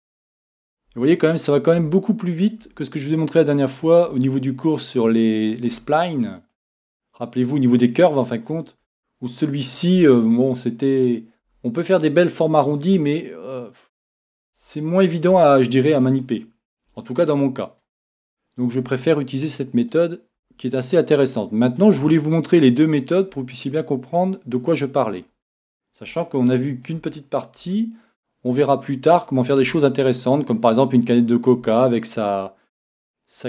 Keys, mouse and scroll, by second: 0.9 e, 1.8 e, 2.6 e, 4.1 e, 5.7 e, 6.1-8.3 drag, 6.8 e, 8.8 e, 8.9-11.8 drag, 10.0 e, 11.4 e, 12.9 e, 14.1 click, 14.5 e, 14.7-17.7 drag, 15.3 e, 17.0 middle click, 17.8 click, 17.8-18.9 middle drag, 18.8 e, 20.0 click, 20.4 e, 20.8-25.0 drag, 22.0 e, 23.3 e, 25.2-27.0 drag, 26.3-28.1 middle drag, 27.6 e, 29.2-31.2 drag, 29.6 e, 31.5-33.3 drag, 31.6 e.